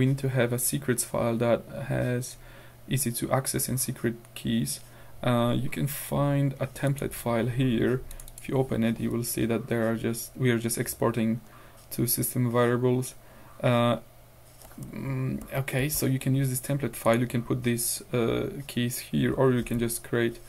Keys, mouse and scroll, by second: 5.0 scroll down 2, 6.9 click, 8.2 click, 15.5 ctrl+w, 15.9 ctrl+q, 17.1 click, 19.7 ctrl+c.